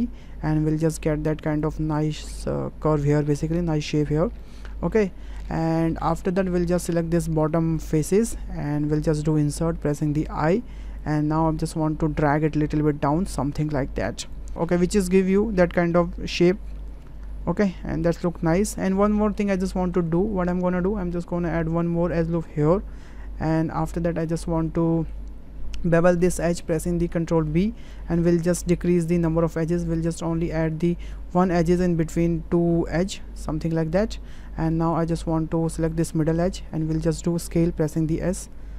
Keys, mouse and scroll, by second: 4.4 click, 5.4 middle click, 6.1 shift+middle click, 6.5 middle click, 7.4 3, 9.4 i, 11.5 middle click, 12.5-14.3 drag, 15.9 middle click, 16.8-18.0 middle drag, 19.0 ctrl+middle click, 19.6 shift+click, 20.1 Tab, 21.7 click, 22.4-23.5 drag, 24.2 click, 26.5 ctrl+b, 35.9 alt+click, 37.9 s.